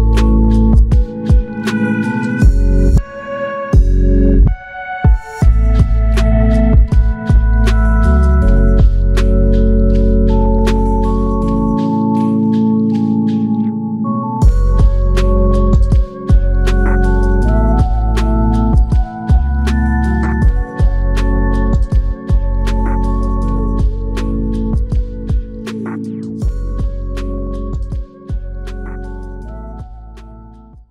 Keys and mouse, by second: 1.4 double click, 5.4 alt+click, 7.0 double click, 7.7 alt+click, 8.7 double click, 9.1 alt+click, 9.9 ctrl+alt+click, 10.7 alt+click, 12.8 ctrl+alt+click, 17.3 r, 24.7 shift+click, 25.6 shift+click, 28.7 ctrl+alt+click, 29.5 alt+shift+click, 30.1 alt+click.